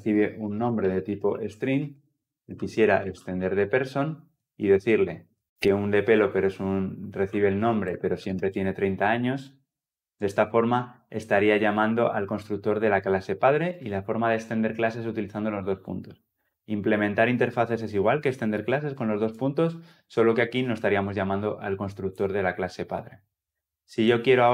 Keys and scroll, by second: 4.8 Return.